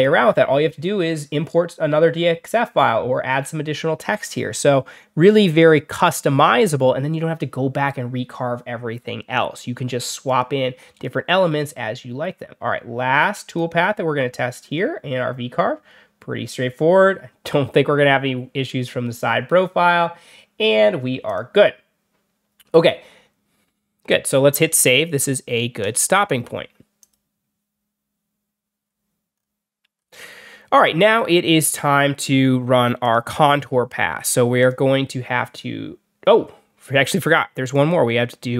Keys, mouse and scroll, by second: 5.4 click, 10.1 click, 13.3 click, 21.1 click, 25.7 click, 26.9 click, 28.8 scroll down 1, 29.2 scroll up 2, 29.8 scroll down 2, 32.9 click, 34.5 click, 37.5 click.